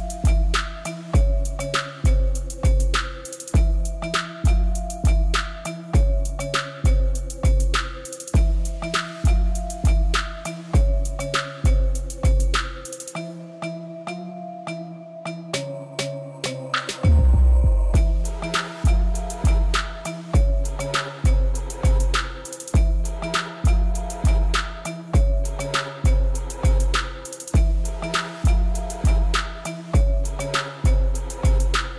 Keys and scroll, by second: 4.9 Caps_Lock, 5.3 Tab, 5.6 Caps_Lock, 6.8 s, 8.3 g, 9.6 Tab, 11.5-12.5 typing, 12.7 Return, 19.0 ctrl+c, 20.5 x, 20.9 ctrl+v, 21.7 ctrl+z, 23.4 ctrl+c, 24.3 ctrl+v, 26.6 Tab, 31.1-31.9 typing.